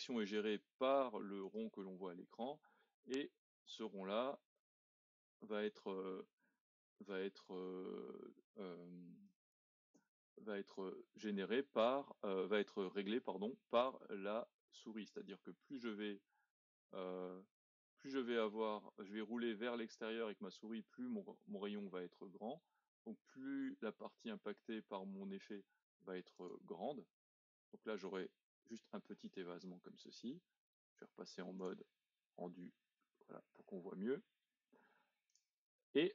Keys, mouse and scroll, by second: 2.1-2.9 scroll down 2, 2.9 middle click, 3.7-5.0 scroll up 2, 5.2 z, 27.1-28.8 middle drag, 28.8-29.3 scroll down 2, 29.3 middle click, 30.1-31.6 scroll up 2, 31.6 click, 32.0-32.9 scroll down 2, 32.9 middle click, 33.4-35.3 scroll up 2, 35.3 click, 36.0-36.1 middle drag.